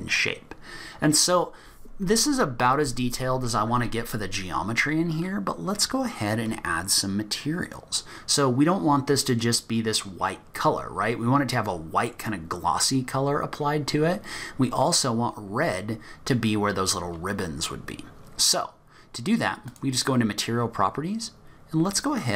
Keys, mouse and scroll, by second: 2.9-3.4 scroll up 1, 3.6-4.7 scroll down 1, 4.7-5.1 scroll down 2, 5.1-6.0 scroll up 1, 19.7 click.